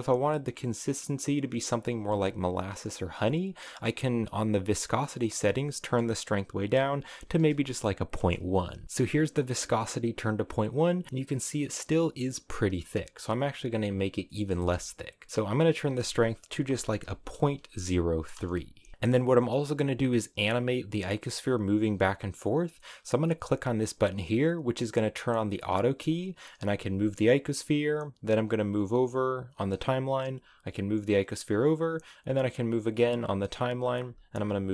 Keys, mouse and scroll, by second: 1.9 space, 5.1-8.2 drag, 8.8-14.2 drag, 14.2 middle click, 14.5 space, 15.4-18.9 drag, 18.9-21.6 middle drag, 21.6-24.7 drag, 25.3 click, 26.6 g, 28.2-30.2 drag, 30.2 g, 32.4-33.9 drag, 33.9 g.